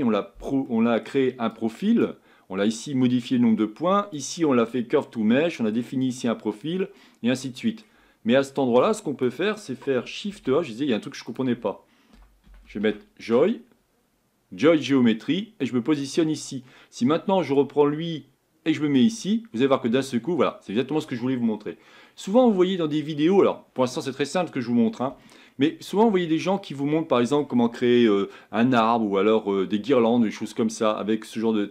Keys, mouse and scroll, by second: 19.2 click, 19.6-22.3 middle drag, 22.3 scroll down 3, 22.7-31.7 middle drag.